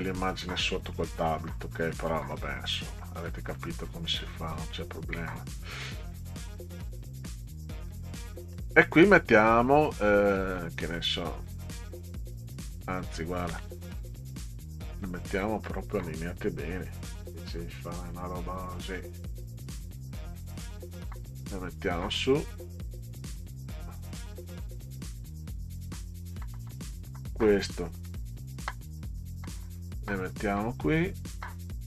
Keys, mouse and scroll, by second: 1.3 middle click, 2.0 middle click, 3.0 middle click, 8.2 middle click, 10.6 middle click, 12.5 click, 13.8 shift+click, 14.2 shift+click, 15.4 middle click, 16.9 click, 18.0 click, 20.8 middle click, 21.8-25.4 drag, 27.3 click, 27.9 middle click, 29.2-31.8 drag.